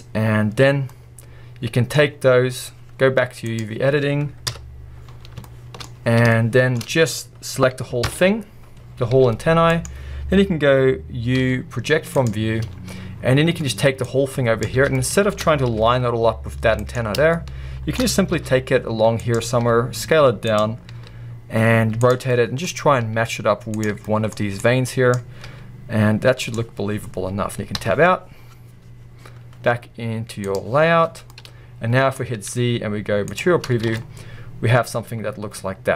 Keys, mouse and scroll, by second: 0.9-2.0 middle drag, 3.6 click, 4.5 KP_1, 5.1-6.4 scroll up 2, 5.5-6.8 shift+middle drag, 8.1 ctrl+l, 8.8-9.1 scroll down 1, 9.1 g, 9.8 right click, 10.3-12.3 scroll up 1, 12.3 u, 14.6 click, 15.7-17.0 middle drag, 15.7 g, 17.0 right click, 18.2 right click, 18.4 g, 19.4 click, 19.7 s, 20.6 click, 21.0 r, 22.1 click, 23.0 click, 23.0 g, 23.8-25.5 drag, 25.5 g, 30.5 click, 31.1 scroll down 1, 31.3-32.1 middle drag, 33.4 z, 33.6-33.9 scroll down 1, 33.9 a, 34.0-35.9 middle drag.